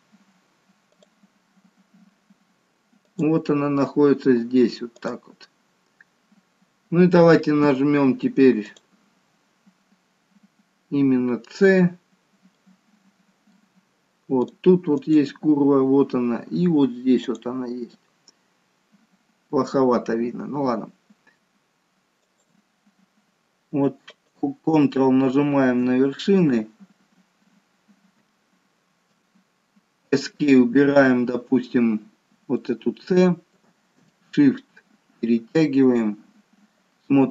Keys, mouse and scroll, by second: 1.2 click, 8.8 click, 11.5-12.6 scroll down 3, 12.6 middle click, 14.5 click, 15.0 click, 17.3 click, 19.0-19.7 scroll up 3, 19.7-20.2 scroll down 1, 20.2 scroll down 2, 32.7 alt+middle click, 34.3 shift+middle click.